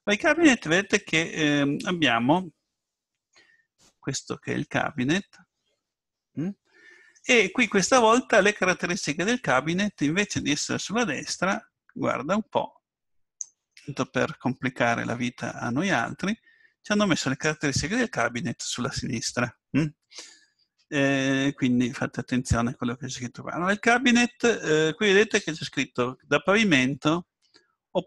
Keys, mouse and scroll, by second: 3.7-7.4 middle drag, 11.3-15.6 drag.